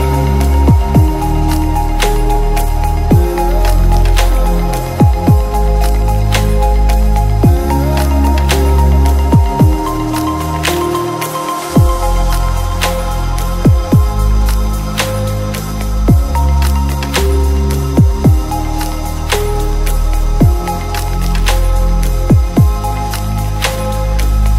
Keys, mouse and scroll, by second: 0.0 middle click, 0.1 click, 2.0 click, 2.2 click, 3.1 right click, 3.3 click, 4.2 shift+middle click, 4.4 shift+middle click, 4.9 alt+d, 5.2 r, 5.7 KP_0, 5.7 middle click, 6.3 click, 7.0 middle click, 7.2 middle click, 8.2 KP_7, 8.3 ctrl+middle click, 8.3 shift+KP_9, 8.8 middle click, 8.9 ctrl+click, 9.1 ctrl+alt+click, 10.6 click, 11.0 click, 11.8 click, 12.3 shift+d, 13.2 ctrl+click, 14.2 ctrl+click, 14.6 right click, 15.1 middle click, 15.5 alt+d, 16.3 click, 16.6 middle click, 17.4 shift+middle click, 17.7 click, 17.9 middle click, 18.3 shift+s, 18.7 click, 19.6 click, 19.9 g, 20.9 shift+click, 21.1 click, 24.0 shift+s.